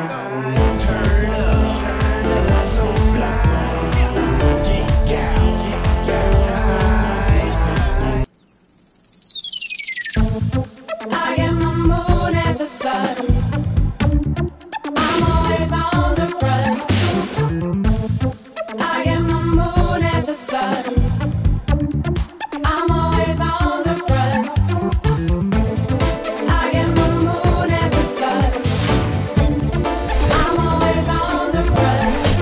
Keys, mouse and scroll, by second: 0.6-1.4 typing, 3.8 click, 4.5-5.7 scroll up 3, 6.8 click, 8.6 click, 9.3 click, 10.1 click, 12.8 click, 15.6 alt+click, 22.5 alt+click, 23.6-25.5 drag, 27.0 alt+click, 27.8 click, 28.6 alt+click, 30.8 alt+click.